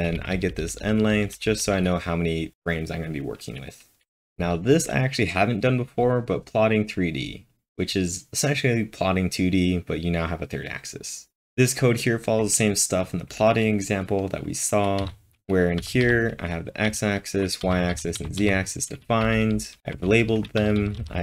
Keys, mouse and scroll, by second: 0.0-2.1 typing, 4.1 typing, 15.0-15.8 typing, 17.7 typing, 19.0-20.3 typing.